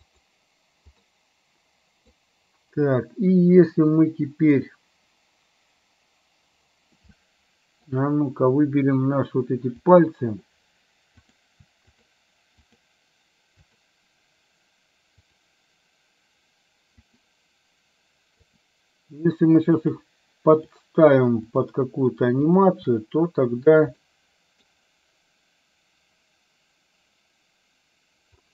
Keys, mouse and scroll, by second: 0.1 click, 1.1-2.3 middle drag, 7.2 middle click, 9.9 click, 11.2 click, 12.9 shift+click, 13.6 shift+click, 17.1 shift+click, 18.5 shift+click, 20.6 shift+click, 21.6 shift+click, 24.1 middle click.